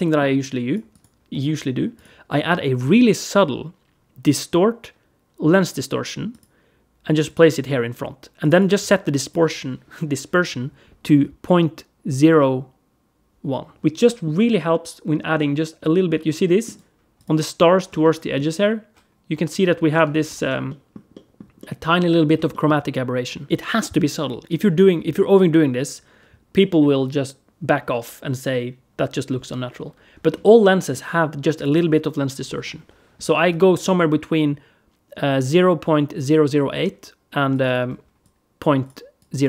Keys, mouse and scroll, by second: 0.2 click, 0.7 click, 1.1 middle click, 1.8 click, 2.6 shift+a, 8.2 click, 13.8 middle click, 14.3 alt+middle click, 15.2 middle click, 16.3 middle click, 16.5 alt+right click, 17.0 click, 17.8 alt+middle click, 19.1 scroll up 1, 19.4 scroll down 2, 19.8 alt+v, 20.0 alt+v, 20.1 alt+v, 20.3 alt+v, 20.5 alt+middle click, 20.9 alt+middle click, 21.4 alt+middle click, 22.3 alt+middle click, 30.2 alt+middle click, 31.4 click, 37.3 click.